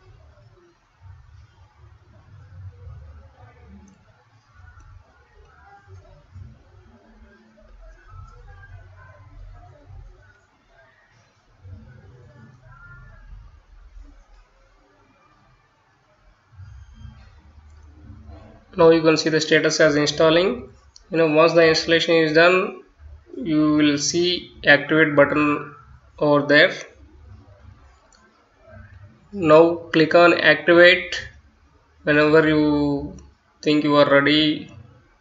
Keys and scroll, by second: 6.9-11.9 typing, 12.0 Return, 34.3-35.2 typing.